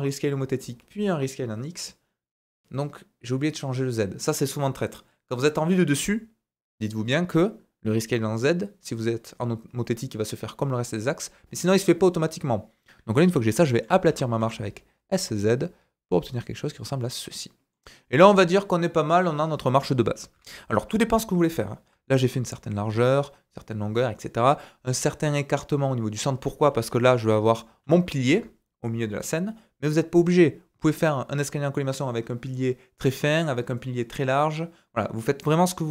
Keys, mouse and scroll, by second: 13.0-13.8 scroll up 4, 13.6 shift+middle click, 14.1 s, 16.7-27.2 middle drag, 17.9 scroll down 2, 20.3 KP_7, 27.0 d, 27.2-35.9 drag, 27.5 d, 27.6 d, 27.7 d, 28.2 ctrl+z.